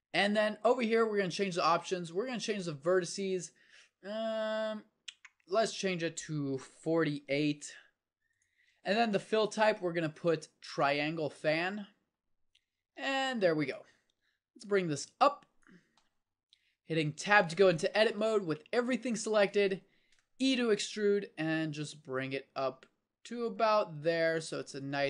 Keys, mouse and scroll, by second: 9.5-11.3 drag, 13.9-15.8 drag, 17.2 Tab, 20.4 e.